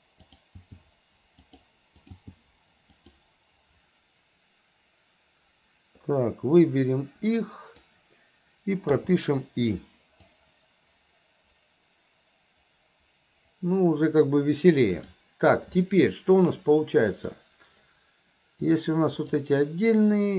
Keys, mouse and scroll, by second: 0.3 click, 2.0 click, 6.6-8.0 drag, 10.3-15.3 drag, 17.1 click, 18.7-19.4 drag.